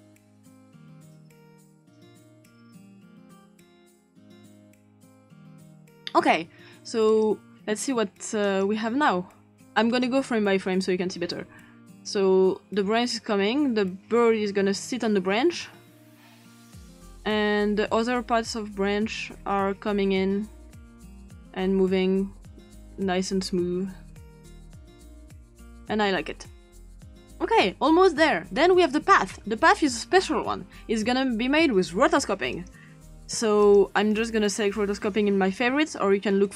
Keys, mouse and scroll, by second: 1.5 click, 1.7 click, 2.2 click, 2.4 click, 2.6 click, 2.9 scroll up 2, 3.2 click, 3.3 click, 4.0 click, 5.5 click, 7.1 click, 8.4 click, 11.4 Right, 12.0 Right, 12.7 Right, 13.7 Right, 14.4 Right, 15.2 Right, 15.9 Right, 16.7 Right, 17.7 Right, 18.4 Right, 19.2 Right, 19.9 Right, 20.7 Right, 21.3 Right, 21.7 Right, 22.2 Right, 22.5 Right, 22.7 Right, 22.8 Right, 23.0 Right, 23.2 Right, 23.5 Right, 23.9 Right, 24.0 Right, 24.4 Right, 24.6 Right, 24.9 Right, 25.2 Right, 25.3 Right, 28.6-29.3 scroll up 2, 29.3-30.0 scroll up 1, 32.6 click, 34.6-35.6 drag, 36.4 click.